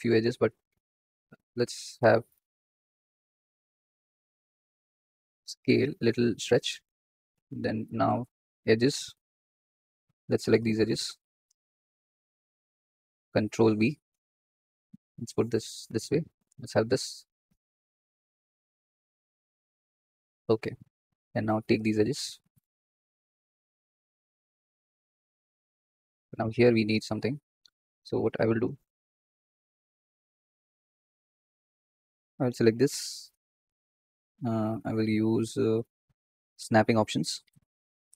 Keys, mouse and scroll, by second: 2.2-4.1 drag, 4.1 s, 4.4 a, 5.1 s, 7.2 Tab, 7.7 Tab, 8.7 alt+shift+click, 9.3 alt+shift+click, 10.2-11.2 alt+shift+drag, 11.6-12.9 alt+shift+drag, 13.5 ctrl+b, 21.4 click, 22.4 shift+click, 23.0 shift+click, 23.6-24.8 shift+drag, 25.2 shift+click, 28.2 click, 29.6 scroll up 3, 29.9-31.1 shift+middle drag, 31.1 click, 32.7 2, 33.3 3, 34.6-37.4 drag, 37.6 click.